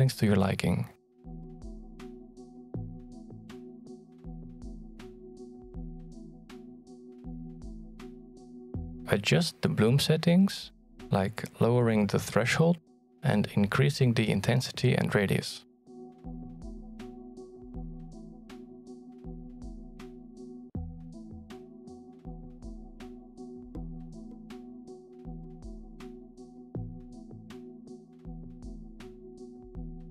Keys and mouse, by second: 0.8-6.4 shift+drag, 6.9-9.0 drag, 9.8-11.9 drag, 13.7 click, 20.8-23.6 shift+drag, 24.8-26.8 drag, 27.8-30.1 drag.